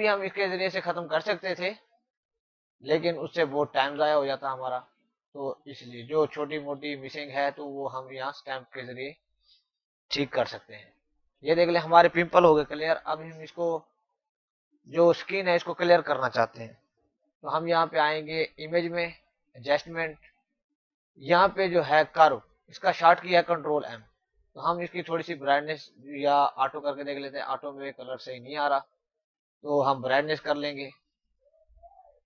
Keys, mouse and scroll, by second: 0.1 space, 0.3 click, 0.7 space, 1.9 alt+click, 4.0 space, 4.1 click, 4.4 space, 5.2 click, 5.6 click, 6.2 space, 6.3 click, 6.7 space, 7.0 alt+click, 10.3 ctrl+-, 11.4 typing, 12.6 ctrl+=, 18.2 click, 23.4 click, 26.5 click.